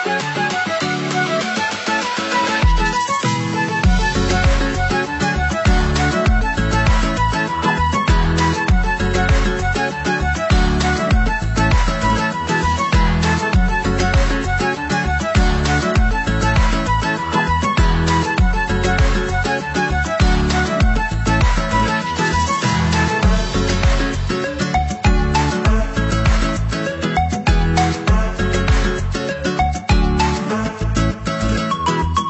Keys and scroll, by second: 4.8 ctrl+c, 5.0 ctrl+v.